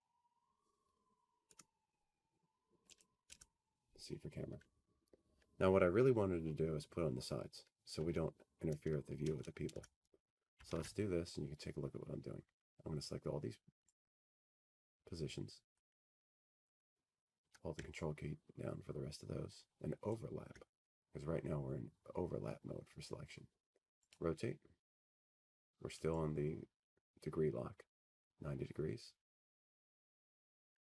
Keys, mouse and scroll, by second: 2.6 click, 7.0 F3, 8.7 click, 10.6 click, 14.6-15.3 scroll, 14.6 t, 15.3 F3, 16.3 alt+w, 17.1-18.3 scroll, 18.3 scroll, 21.3 click, 25.6 ctrl+click, 29.9 click.